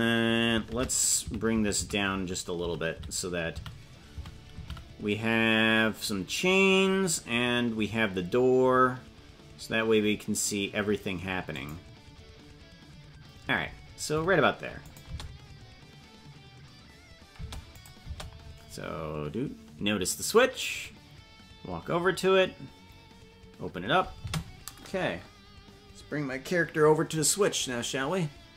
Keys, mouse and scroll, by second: 14.8 click, 15.0 space, 17.5 space, 17.7 click, 18.0 space, 24.2 space.